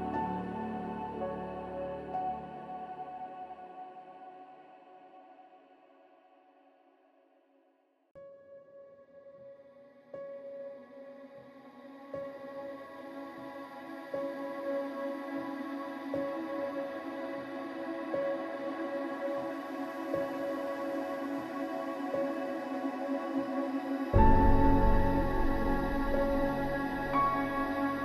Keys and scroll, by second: 22.6 ctrl+shift+-, 23.2 ctrl+shift+-.